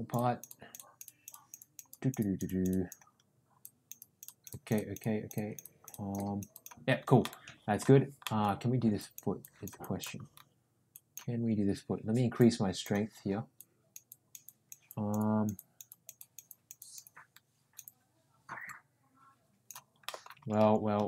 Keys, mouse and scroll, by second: 1.8 click, 3.5 click, 3.9 click, 6.5 click, 7.2 middle click, 8.2 middle click, 8.9 click, 9.4 click, 9.8 click, 10.9 click, 12.4 click, 13.5 click, 14.0 click, 14.4 click, 14.8 click, 15.5 click, 15.9 click, 16.1 click, 16.5 click, 16.7 click, 17.8-19.7 drag, 20.0 middle click, 20.7 ctrl+z.